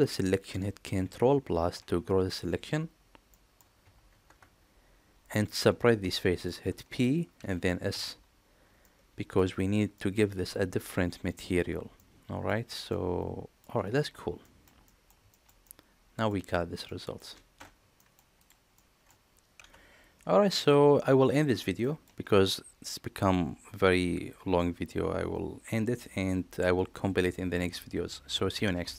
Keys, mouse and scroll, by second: 1.3 ctrl+KP_Add, 3.1 middle click, 4.1 ctrl+KP_Add, 5.2-6.3 middle drag, 7.2 p, 8.6 middle click, 9.8 middle click, 11.8 middle click, 12.7 middle click, 14.2 shift+middle click, 14.7 middle click, 15.1 shift+middle click, 15.4 middle click, 16.7 middle click, 17.4 Tab, 17.8 middle drag, 18.2 click, 18.6 middle click, 20.4-21.1 middle drag, 21.6 shift+middle click.